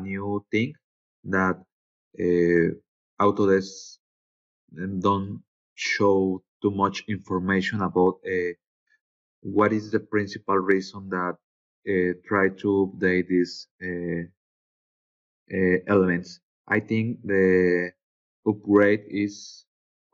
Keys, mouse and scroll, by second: 18.4 scroll down 2, 19.0-19.6 scroll down 4.